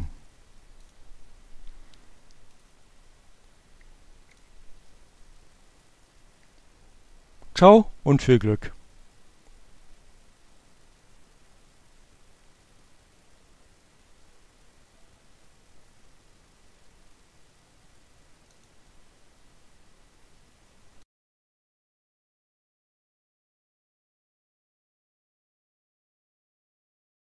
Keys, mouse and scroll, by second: 3.1 click, 3.9 click, 4.3-5.6 right drag, 6.2 click, 23.9 click.